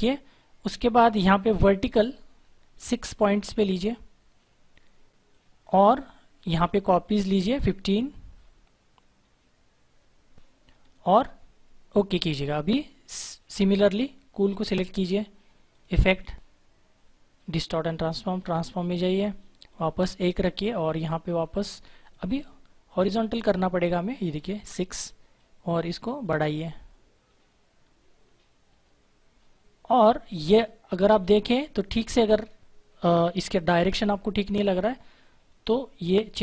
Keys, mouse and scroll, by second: 1.4 click, 1.9-4.9 scroll up 1, 5.2 click, 6.9-8.2 scroll up 1, 11.8 click, 18.0 click, 19.9-21.7 scroll up 1, 22.1 click, 23.0-26.1 scroll up 1, 26.2 click, 27.4-31.8 scroll up 1, 31.8 click, 35.4 click, 36.0-36.4 scroll down 1.